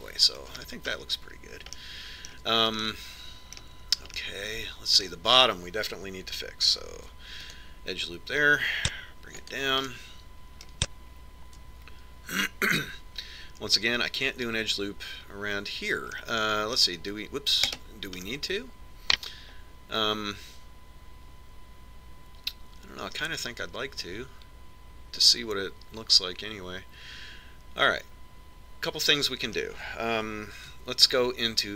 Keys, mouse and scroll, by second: 1.8-7.2 middle drag, 1.8-3.1 scroll up 1, 8.3 ctrl+r, 11.2-13.1 middle drag, 13.5 ctrl+r, 19.1-20.8 right drag, 20.8 middle click.